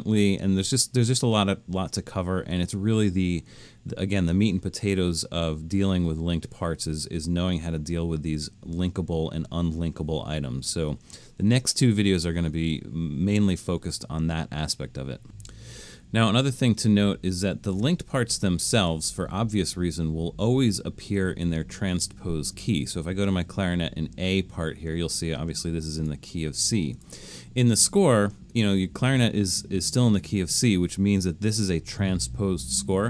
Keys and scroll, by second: 16.1 super+-.